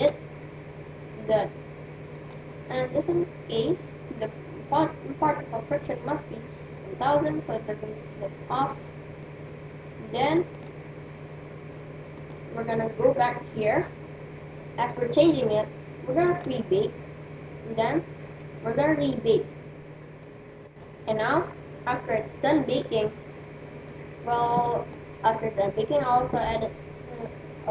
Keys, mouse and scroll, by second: 2.5-4.0 right drag, 8.7-10.3 middle drag, 10.9-12.7 drag, 12.7-14.1 right drag, 16.3-18.2 drag, 22.7-24.5 middle drag.